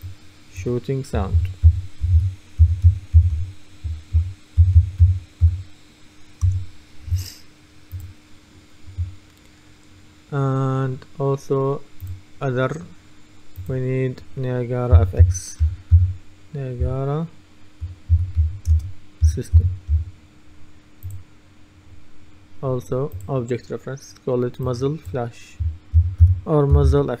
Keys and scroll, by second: 1.2-6.0 typing, 6.5 Return, 15.0-16.9 typing, 18.2-20.5 typing, 25.8-27.2 typing.